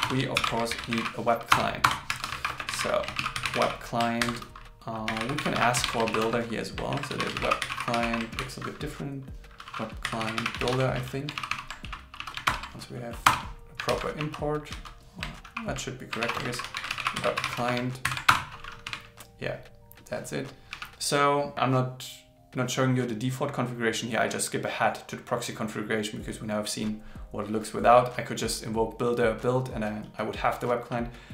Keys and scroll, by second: 0.4 alt+l, 0.7 shift+b, 3.1 shift+c, 4.2 shift+8, 6.1 shift+., 6.9 shift+w, 8.4 shift+b, 11.4 alt+Left, 12.5 alt+Return, 13.9 super+Right, 16.2 shift+., 16.5 shift+w, 18.1 alt+8.